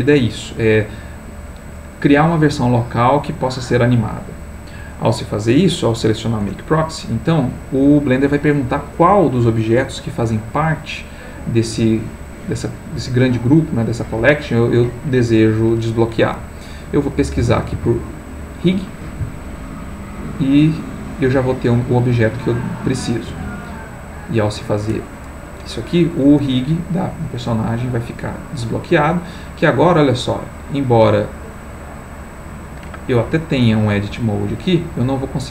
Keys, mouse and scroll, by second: 6.4 Return, 17.4 r, 17.7 i, 23.3 click, 30.1 click, 33.5 click, 34.2 click.